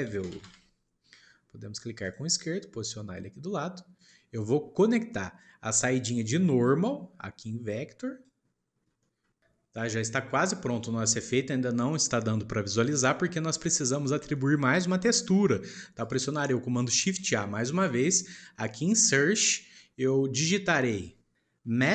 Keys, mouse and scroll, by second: 4.5-5.6 scroll up 1, 5.6 shift+middle click, 6.6 click, 9.0-10.2 shift+middle drag, 10.2 click, 12.8 scroll down 1, 15.1-16.0 shift+middle drag, 16.0 shift+click, 17.1 shift+a.